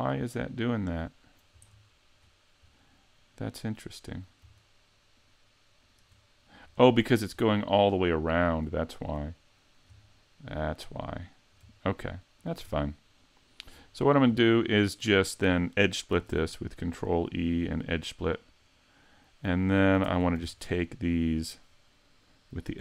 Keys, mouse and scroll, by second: 1.7-2.4 shift+scroll up 8, 2.8 scroll down 2, 3.3 middle click, 5.2 shift+right click, 5.8 shift+right click, 7.4-7.8 scroll up 3, 7.8 shift+middle click, 9.0 shift+right click, 9.4 middle click, 10.2 shift+middle click, 11.0 middle click, 12.4 shift+right click, 12.7 scroll down 4, 13.2 middle click, 13.9 shift+middle click, 14.4 middle click, 15.2 shift+middle click, 16.3 ctrl+e, 20.1 ctrl+Tab.